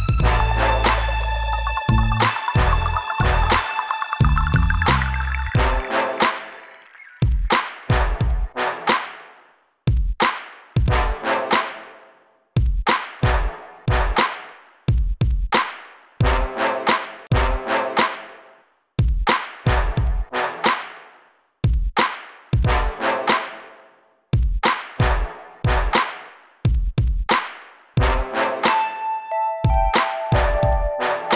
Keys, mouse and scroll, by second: 6.8 click, 6.8 click, 13.2 click, 13.3 click, 13.6 right click, 13.7 double right click, 14.2 middle click, 15.7 click, 15.8 click, 16.6 click, 16.6 click, 16.9 click, 17.9 click, 20.3 middle click, 22.2 middle click, 23.3 click, 24.9 click, 28.5 middle click.